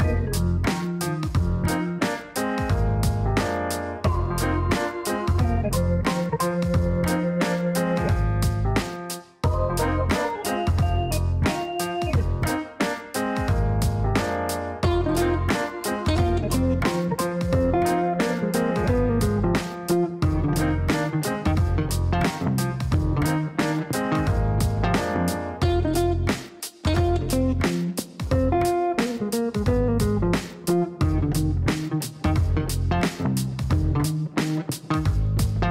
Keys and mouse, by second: 0.3 p, 2.4 click, 3.4 click, 4.4 click, 6.7 right click, 10.3 click, 16.2 click, 18.7 click, 21.1 click, 23.1 click, 24.0 click, 25.1 click, 26.0 click, 26.5 right click, 29.5 click, 30.5 click, 31.1 click, 31.8 click, 34.8 click, 35.6 click.